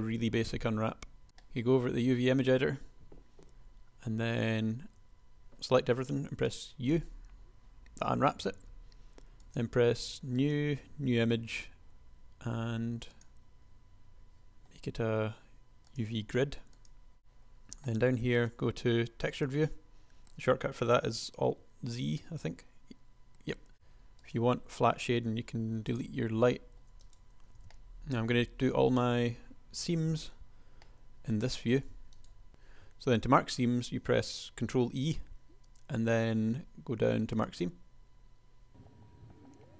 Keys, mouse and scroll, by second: 5.3 a, 6.0 u, 22.2 alt+z, 22.4 alt+z, 23.9 Tab, 25.3 Delete, 27.4 shift+super+KP_1, 32.5 ctrl+z, 32.5 e, 33.2 ctrl+e.